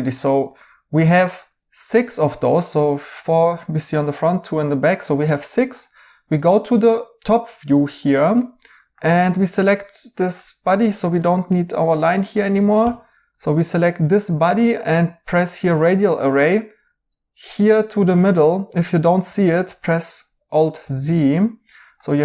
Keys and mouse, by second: 0.1 right click, 4.9 right click, 6.3 right click, 8.3 right click, 9.2 Tab, 10.6 2, 12.7 x, 13.2 Tab, 17.5 right click, 19.2 alt+z, 20.8 alt+z.